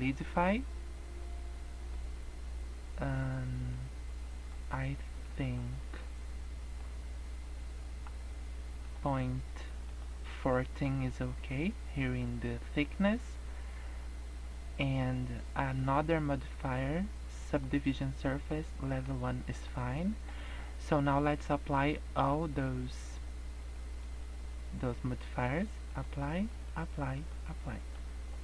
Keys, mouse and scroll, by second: 1.1 middle click, 2.0-2.4 scroll up 3, 2.8-3.2 scroll down 3, 3.7 click, 4.3 click, 5.8 middle click, 8.8 click, 9.1 click, 9.8 click, 10.5 middle click, 11.0 scroll down 2, 11.2 middle click, 13.8-15.7 scroll up 9, 15.7 click, 17.9 middle click, 18.7 scroll up 1, 18.8 middle click, 19.1-19.5 scroll down 2, 19.5 scroll up 1, 19.9 middle click, 24.6 scroll up 2, 25.9 click, 26.5 click, 27.1 click, 27.6 middle click, 28.1 scroll down 3, 28.3 middle click.